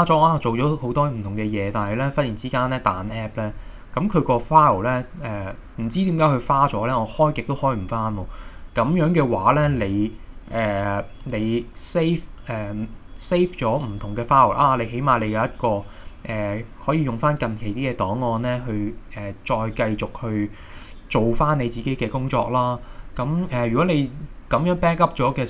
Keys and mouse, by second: 6.7-8.4 middle drag, 11.2-22.7 drag.